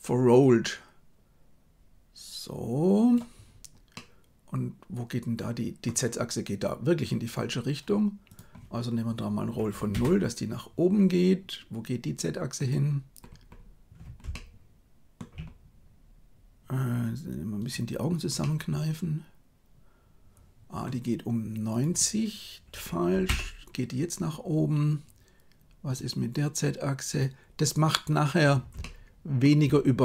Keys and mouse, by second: 0.4-3.2 drag, 3.8-5.7 middle drag, 8.2-9.9 drag, 14.2 shift+middle click, 18.4-20.7 middle drag, 21.6-23.3 drag, 25.8 right click, 28.7 shift+middle click.